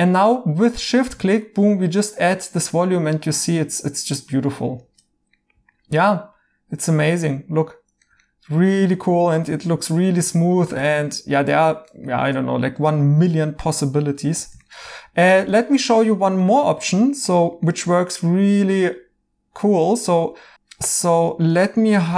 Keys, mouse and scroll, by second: 5.3 right click, 8.2 right click, 10.6 right click, 13.3-14.5 right drag, 14.5 alt+h, 14.6-18.8 right drag, 21.1 Tab.